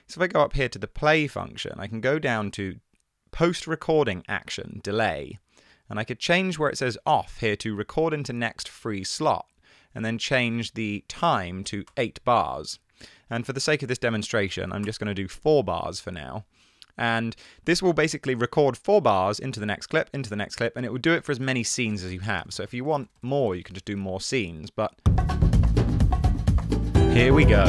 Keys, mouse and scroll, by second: 11.8 8, 11.9 Return, 14.6 4, 14.8 Return, 22.2 super+i, 23.2 super+i, 23.9 super+i.